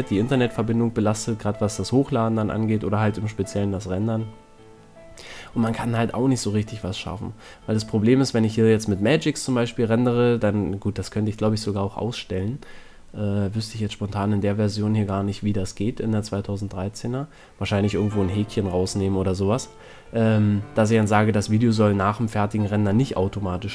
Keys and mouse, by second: 2.4-4.0 right drag, 3.7 ctrl+l, 4.3 KP_1, 4.9 middle click, 6.3 shift+d, 11.3-13.1 drag, 12.3 a, 12.5 a, 12.7 c, 14.2 a, 14.9 z, 16.4 c, 20.9-23.3 middle drag.